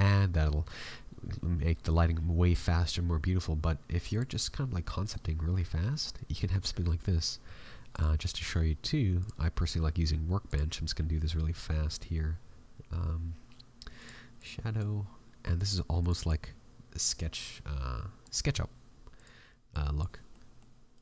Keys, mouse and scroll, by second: 5.6 scroll down 2, 5.8 middle click, 7.9 click, 10.4 click, 14.0 click.